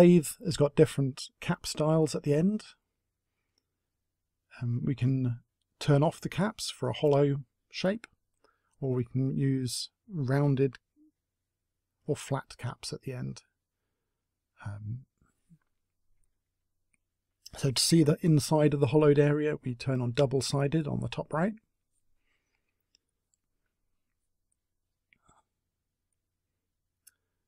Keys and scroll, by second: 27.0 Delete.